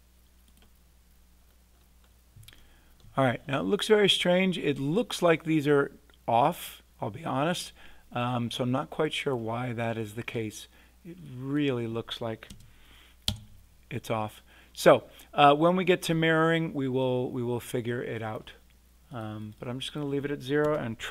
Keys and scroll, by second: 12.5 0, 13.2 Return, 20.6 0.